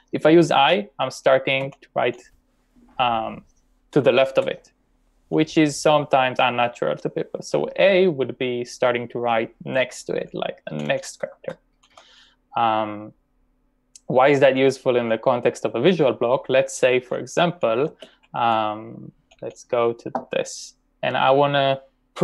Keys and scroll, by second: 0.7 i, 1.6 s, 4.4-5.4 typing, 7.5 l, 9.8-10.9 typing, 17.6-19.7 typing.